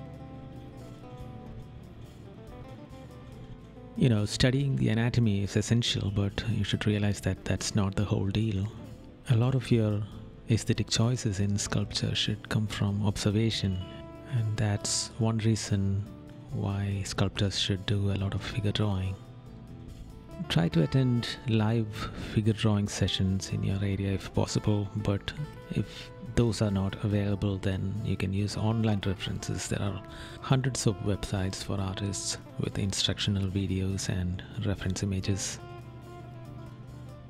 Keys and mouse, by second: 1.6 right click, 5.3 right click, 6.3 right click, 7.7 right click, 8.1 right click, 9.6 right click, 10.2 right click, 12.0 right click, 13.2 right click, 14.7 right click, 15.6 right click, 16.2 right click, 18.0 right click, 18.7 right click, 19.6 right click, 20.6 right click, 21.6 right click, 23.9 right click, 24.7 right click, 30.2 right click, 30.9 right click, 32.1 right click, 33.8 right click, 36.8 right click.